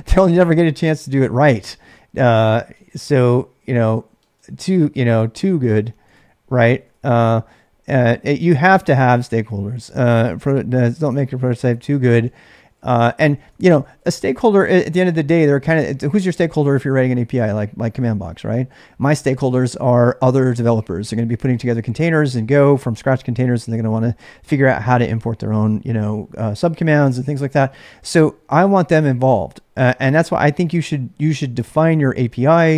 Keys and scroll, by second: 0.0-0.1 typing, 2.1-7.1 typing, 9.1-15.2 typing.